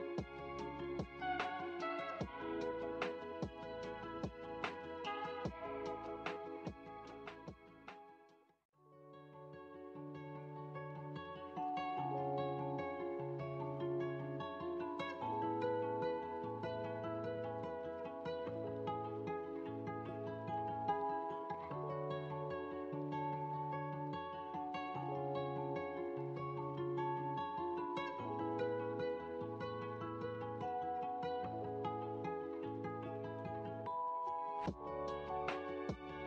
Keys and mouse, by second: 8.6-20.7 drag, 21.5-34.2 drag, 35.1-36.2 drag.